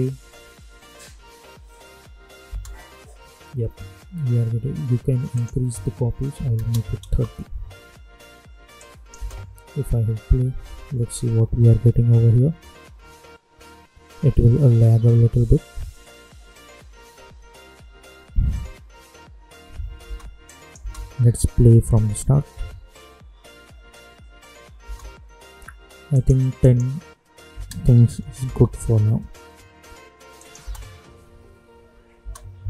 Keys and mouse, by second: 2.4 space, 5.3 click, 7.0 Return, 8.7 click, 9.1 space, 20.0 space, 20.4 click, 20.7 space, 24.8 space, 26.1 click, 28.4 Return, 30.3 click, 30.6 space.